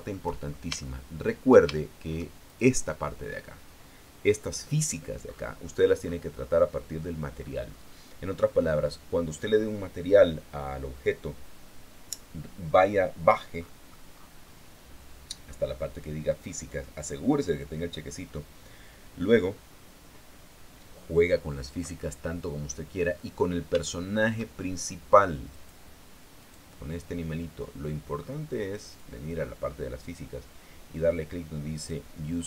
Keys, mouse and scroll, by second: 0.4 shift+middle click, 1.0-1.5 shift+scroll up 1, 1.5 shift+middle click, 2.4 shift+middle click, 3.2 shift+right click, 5.9-7.5 scroll up 1, 8.1-8.6 scroll down 1, 9.3 scroll down 1, 10.7 scroll down 1, 14.0-14.9 scroll up 2, 14.9-16.8 scroll down 3, 23.5-24.4 scroll down 2, 24.4 shift+scroll down 1, 24.6 shift+middle click, 26.2 right click, 26.6-27.1 scroll down 1, 27.1 right click, 27.4 scroll down 1, 28.6 middle click, 29.6 click.